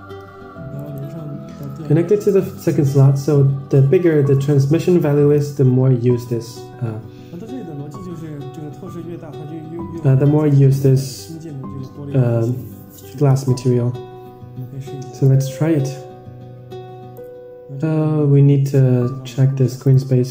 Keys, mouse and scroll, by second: 0.7 click, 1.5-2.5 drag, 4.2 Tab, 12.7-13.7 middle drag, 15.4-17.6 drag, 18.4 n.